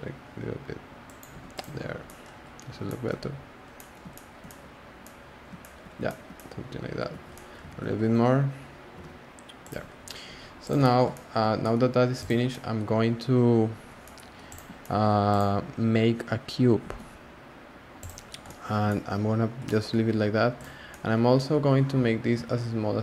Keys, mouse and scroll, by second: 1.3 Tab, 1.5 click, 1.7 scroll down 1, 1.8 scroll up 1, 2.0-2.5 scroll down 2, 2.0-2.4 middle drag, 2.5 scroll up 1, 2.5-2.8 scroll down 1, 2.8-3.2 shift+middle drag, 3.2-3.8 scroll down 6, 3.8-6.7 middle drag, 6.7 scroll up 3, 7.1 z, 7.3 middle drag, 7.7 z, 7.9-8.9 scroll up 2, 8.9 g, 9.7 Tab, 9.9-10.6 scroll down 8, 10.6 click, 10.8-12.2 shift+middle drag, 12.2 click, 12.5-14.5 middle drag, 14.5 click, 14.8-15.3 shift+middle drag, 15.3 click, 15.7-16.8 scroll down 2, 16.8 shift+a, 20.6 drag, 20.9-21.5 middle drag, 21.5 scroll up 1, 21.6-22.3 scroll down 1, 22.3 s.